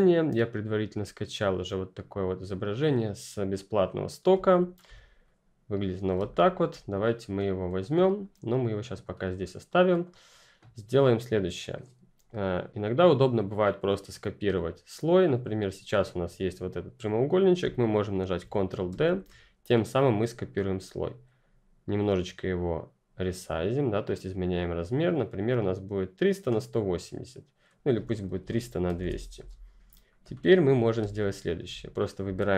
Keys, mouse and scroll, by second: 4.3 ctrl+click, 4.3 ctrl+scroll down 1, 4.9 click, 6.1 space, 6.2 click, 6.6 space, 7.4 click, 9.0-9.6 ctrl+scroll down 1, 9.6-10.2 ctrl+scroll up 1, 10.2 ctrl+click, 10.5 ctrl+scroll down 1, 10.9-15.5 ctrl+scroll up 1, 15.5-17.6 scroll up 2, 17.6-18.3 scroll up 1, 18.3-18.8 ctrl+scroll up 1, 18.8 ctrl+d, 21.2 click, 28.1-29.4 typing, 28.1 click, 30.0 click, 30.3-30.9 ctrl+scroll down 2, 30.9 space, 31.1 click, 31.5 space, 31.9 ctrl+click.